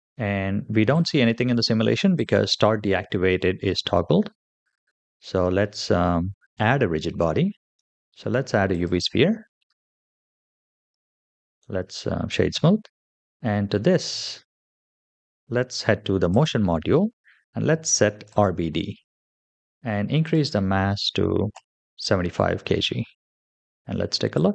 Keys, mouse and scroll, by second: 0.7 click, 2.0 click, 6.4 shift+a, 9.5 g, 11.3 right click, 13.9-14.3 scroll up 2, 16.2 click, 18.1 click, 18.9-20.1 scroll down 3, 20.1-21.7 drag, 24.2 click.